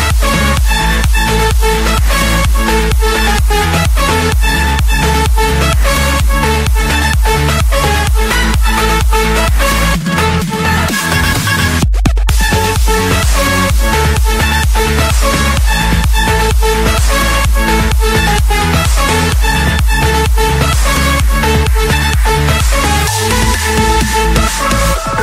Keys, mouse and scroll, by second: 0.4 click, 0.7 Escape, 1.4 click, 2.3 click, 3.0 click, 3.4 click, 4.4-5.0 typing, 5.0 Return, 5.9 Escape, 6.4 click, 6.8 click, 8.2-8.6 typing, 8.9 Return, 10.3 click, 10.9 click, 11.7 Return, 12.2 Escape, 13.1 click, 13.4 click, 14.0 click, 14.2 click, 15.3 right click, 16.8 click, 18.1 click, 18.7 Escape, 19.2 click, 19.5 click, 20.2-21.6 typing, 22.6 Return, 24.1 click.